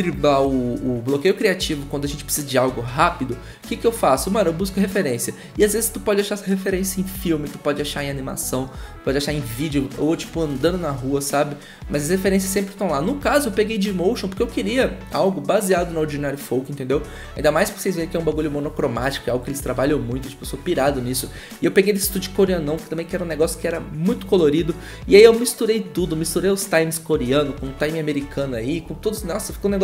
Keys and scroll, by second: 19.8 b.